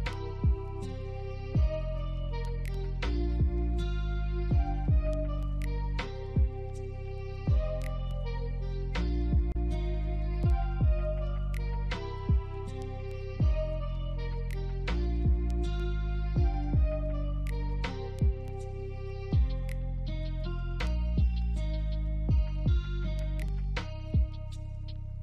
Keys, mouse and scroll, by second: 4.0 typing, 4.1 Return, 7.1 typing, 7.3 Return, 8.1 scroll down 1, 8.4 scroll up 1, 8.7 alt+click, 10.5 scroll up 1, 10.9 alt+middle click, 12.7 alt+click, 13.5 scroll up 1, 14.2 shift+click, 15.4 alt+click, 18.1 alt+click, 21.0 alt+middle click, 21.4 right click, 23.0 right click, 23.2 alt+click, 24.6 alt+middle click.